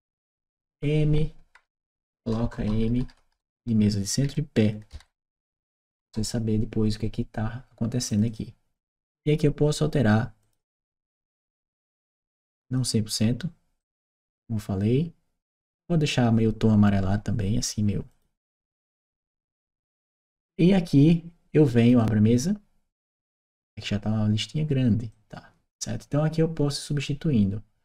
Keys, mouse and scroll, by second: 1.5 Right, 2.1 BackSpace, 4.8 shift+p, 5.1 e, 5.8 Return, 7.9 click, 8.1 click, 10.2 click, 11.1 click, 11.9 click, 12.5 click, 13.6 click, 17.9 click, 19.9 click, 24.9-27.8 drag.